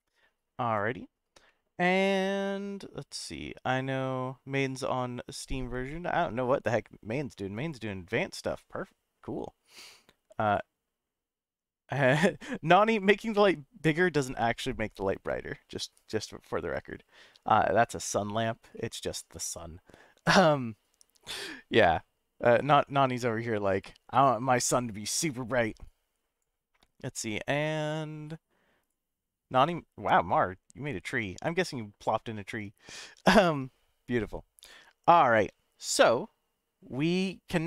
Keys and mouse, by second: 1.5-2.8 middle drag, 18.7-20.9 middle drag, 35.0-36.8 middle drag, 37.6 F12.